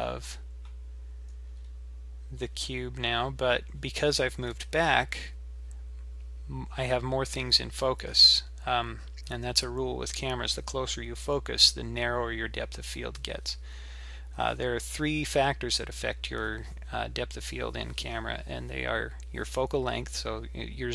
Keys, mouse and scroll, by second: 1.3-2.4 scroll up 4, 2.4-2.9 scroll down 1, 3.4-6.5 scroll down 2.